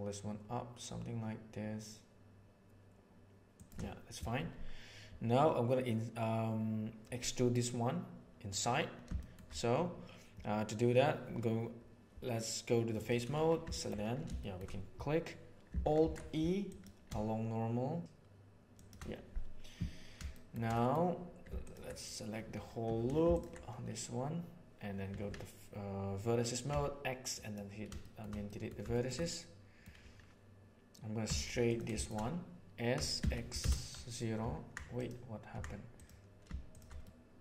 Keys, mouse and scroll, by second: 9.2 shift+middle click, 12.9 click, 13.7 alt+click, 13.9 3, 14.4 shift+middle click, 15.9 alt+e, 20.2 shift+middle click, 20.6 middle click, 22.8 2, 25.0 1, 26.6 x, 28.0 shift+middle click, 28.4 middle click, 28.8 shift+middle click, 29.1 middle click, 31.2 3, 32.0 shift+right click, 32.8 s, 35.9 click, 36.9 middle click.